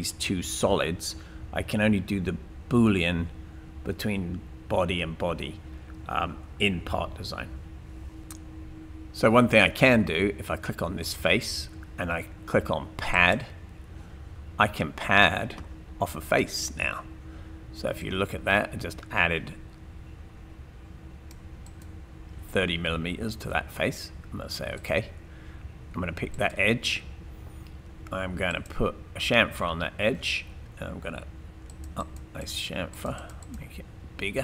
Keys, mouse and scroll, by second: 8.6 scroll down 2, 11.1 click, 26.4 click.